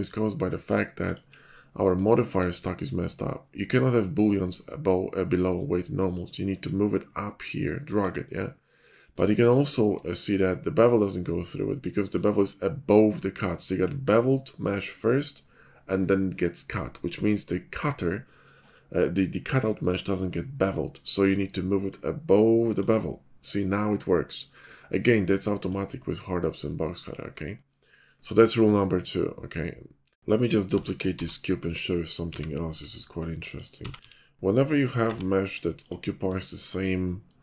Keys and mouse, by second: 2.3 shift+middle click, 6.6-8.0 middle drag, 9.3-11.7 shift+middle drag, 21.9-22.9 middle drag, 25.4 click, 25.7-26.8 drag, 30.4 x, 30.7 shift+d, 33.8 s, 35.9-36.2 drag, 36.3-36.6 shift+middle drag.